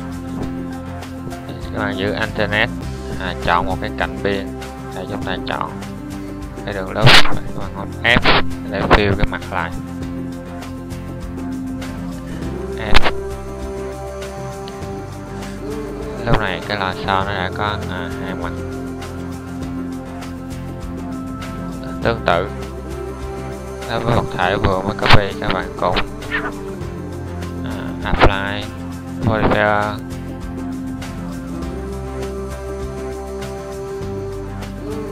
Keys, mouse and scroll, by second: 7.2 f, 12.4 f, 16.0 Tab, 34.7 Tab.